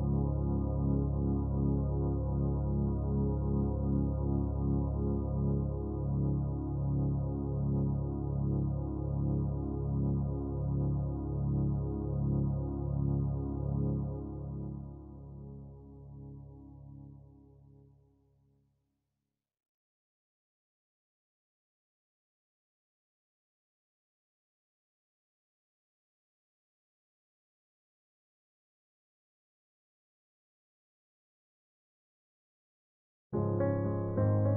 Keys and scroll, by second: 30.2 typing.